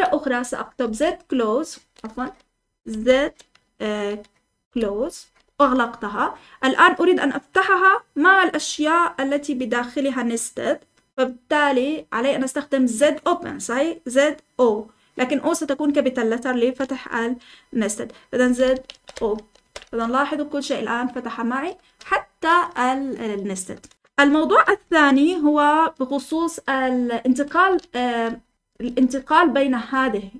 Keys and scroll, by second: 0.0-2.8 typing, 4.4-5.7 typing, 18.3-22.5 typing, 23.7 typing, 24.6 Escape, 25.1-30.3 typing.